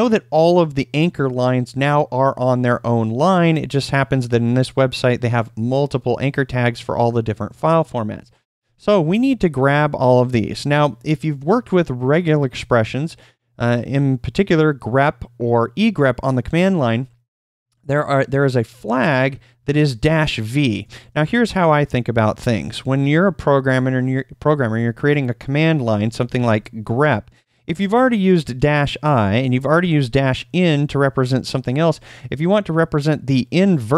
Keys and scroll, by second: 19.3-20.9 typing, 25.8-29.8 typing, 31.9 space.